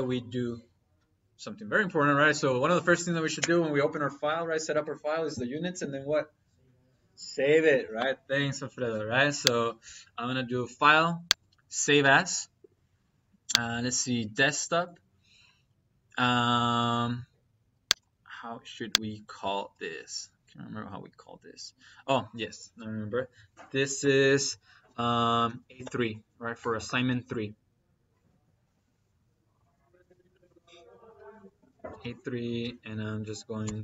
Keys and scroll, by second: 25.3 a, 25.7 3, 30.3 -, 31.2 Left, 31.8 shift+-, 32.6 p, 33.5 m.